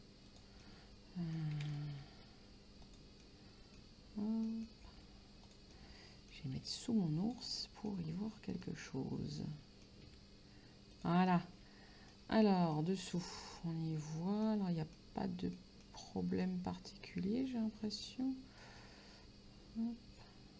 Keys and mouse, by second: 0.3 click, 0.7 middle click, 2.0 g, 2.9 click, 3.3 middle click, 4.5 middle click, 4.9 g, 5.5 click, 5.8 middle click, 6.6 g, 7.3 click, 7.6 middle click, 8.7 middle click, 10.1 g, 11.0 click, 11.3 middle click, 12.8 shift+middle click, 13.3 middle click, 15.0 middle click, 17.5 click, 18.7 right click.